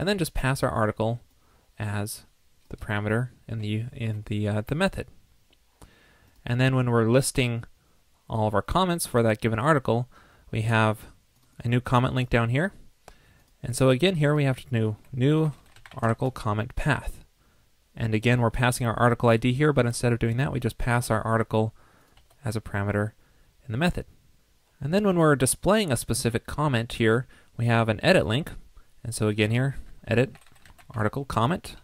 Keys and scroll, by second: 4.0 super+s.